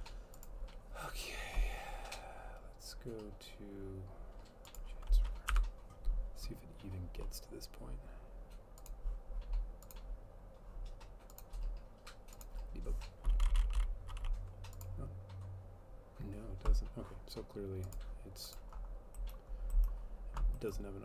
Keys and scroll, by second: 5.6 F12.